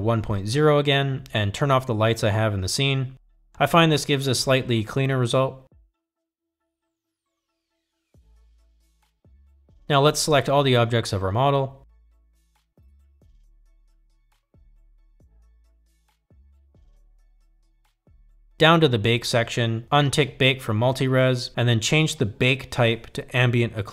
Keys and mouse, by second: 1.0-2.2 drag, 3.3 click, 4.3 click, 5.6 click, 9.0 click, 19.9 click, 23.5-23.9 drag.